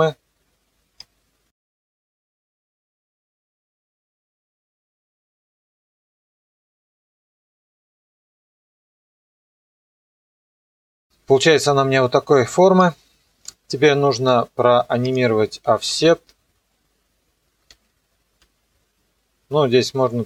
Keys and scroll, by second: 6.6 ctrl+z, 17.7 u.